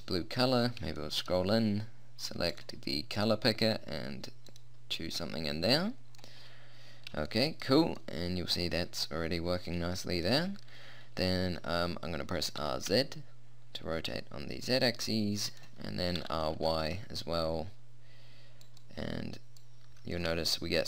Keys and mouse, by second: 0.3 middle click, 2.5-4.3 drag, 4.3 middle click, 5.7-9.3 middle drag, 9.9-12.7 middle drag, 12.7 r, 16.1 r, 19.7-20.8 drag.